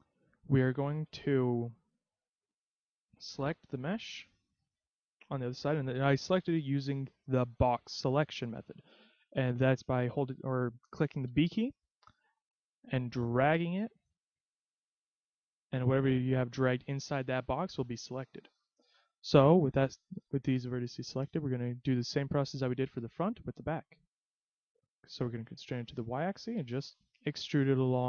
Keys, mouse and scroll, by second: 0.3 a, 1.3 z, 3.3 b, 9.5 a, 11.3 b, 21.6 e, 26.6 click, 27.5 e.